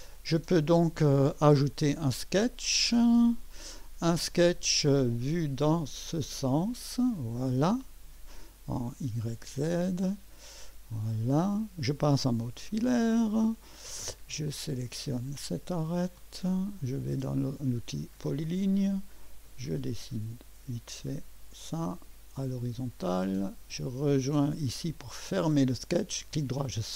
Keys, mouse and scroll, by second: 6.7 click, 9.5 click, 11.6 right click, 12.7 2, 14.5 click, 15.9 click, 17.7 click, 19.7 click, 21.5 click, 22.9 click, 25.2 click, 26.3 right click.